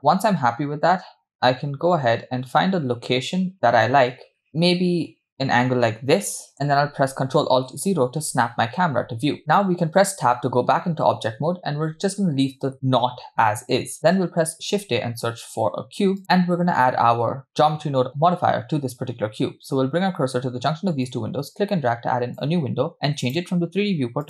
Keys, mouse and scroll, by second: 0.0-6.5 middle drag, 0.0 scroll down 5, 11.1 Tab, 14.6 shift+a, 21.4-24.2 drag.